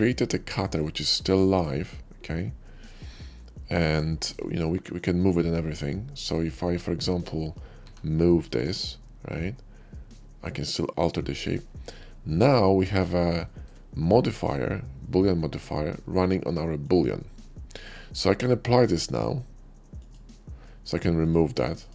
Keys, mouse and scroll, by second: 0.5 shift+middle click, 0.9 shift+middle click, 1.2 shift+middle click, 2.1-3.9 shift+middle drag, 4.1 shift+middle click, 4.7 shift+click, 6.0 shift+click, 7.9 g, 12.0-12.3 middle drag, 13.0-13.6 middle drag, 14.1 shift+click, 16.7 click, 18.0-18.8 middle drag, 18.8 click, 19.8 click, 21.0 click, 21.5 x, 21.7 click.